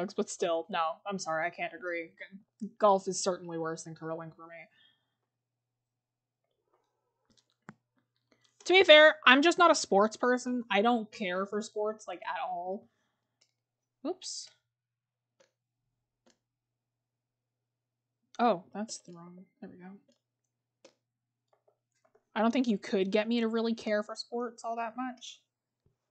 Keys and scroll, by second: 22.1 scroll up 1, 22.3 scroll.